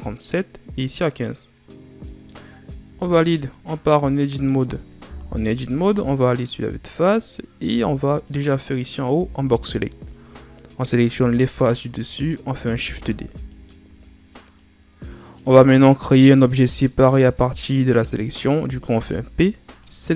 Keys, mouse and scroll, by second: 2.0 scroll up 1, 2.0 middle click, 2.8 Tab, 3.9-5.1 middle drag, 5.1 KP_1, 6.3-7.1 scroll up 5, 7.1-7.6 scroll up 1, 7.6 z, 8.2 right click, 9.1 b, 11.1 z, 12.7 shift+d, 14.5-17.5 drag, 18.8 p.